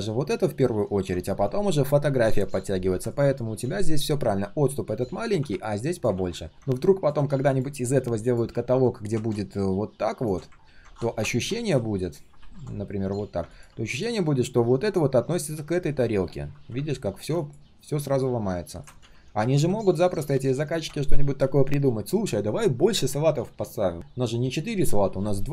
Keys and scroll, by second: 6.1 ctrl+z, 11.6 ctrl+shift+3, 12.9 ctrl+shift+3, 19.0 ctrl+z, 19.2 ctrl+z, 19.5 ctrl+z.